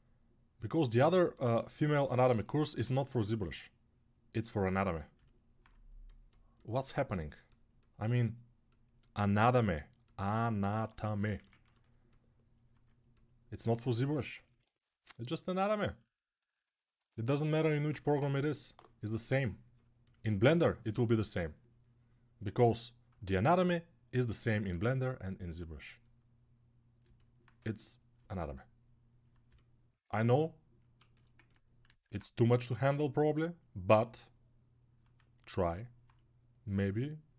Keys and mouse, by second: 1.9-12.4 ctrl+alt+right drag, 12.4-16.5 drag, 17.9 3, 23.4 g, 26.4-30.1 right drag, 31.6 alt+q, 35.8-37.3 drag.